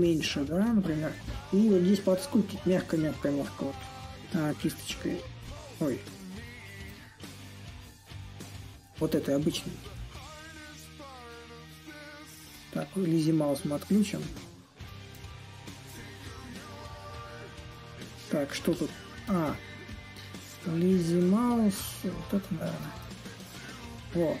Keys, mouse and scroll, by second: 6.3 z, 7.9 ctrl+click, 9.6-13.0 ctrl+drag, 14.0 ctrl+click, 15.2-17.4 ctrl+drag, 17.4 ctrl+z, 19.6 ctrl+click, 21.8 ctrl+click, 23.1-24.4 ctrl+drag.